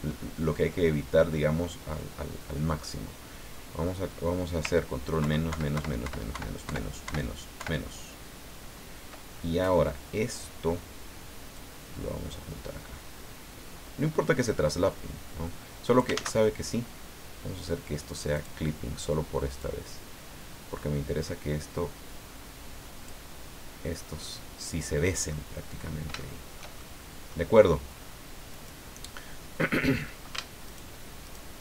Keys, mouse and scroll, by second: 0.7-3.0 middle drag, 5.2 ctrl+KP_Subtract, 11.5-16.2 drag, 16.1 ctrl+z, 18.4 click, 19.6-23.3 drag, 23.5-23.9 scroll down 1, 24.0-25.5 middle drag, 25.8-26.1 scroll up 1, 26.2-27.5 shift+middle drag, 28.5 right click, 30.6 ctrl+shift+right click, 31.2 ctrl+shift+right click.